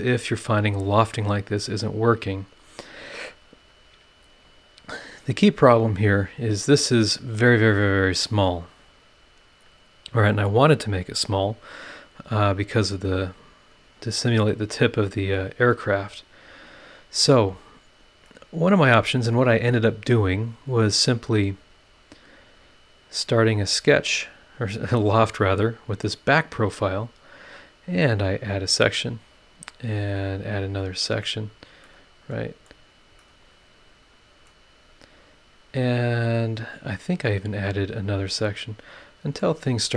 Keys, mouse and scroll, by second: 1.6 click, 4.6-5.0 scroll up 2, 5.2-7.0 scroll up 4, 11.9-13.2 scroll down 1, 13.4-13.7 scroll up 2, 15.7-16.2 scroll down 4, 16.4 scroll up 2, 16.8 click, 18.2 middle click, 19.0 scroll up 2, 21.8 click, 23.9 click, 25.5 click, 27.3 click, 28.7 click, 30.0 click, 31.2 click, 31.8-32.8 middle drag, 31.9 click, 31.9 right click, 32.8 scroll down 1, 33.2-34.6 middle drag, 33.3-34.6 drag, 34.6 scroll up 1, 37.5 click, 38.6 click, 39.4-39.9 middle drag, 39.4-39.9 right drag.